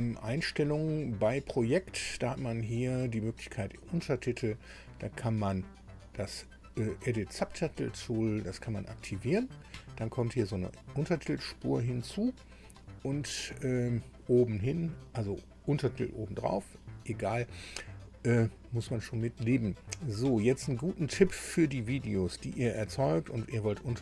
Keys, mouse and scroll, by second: 1.6 click, 8.3 click.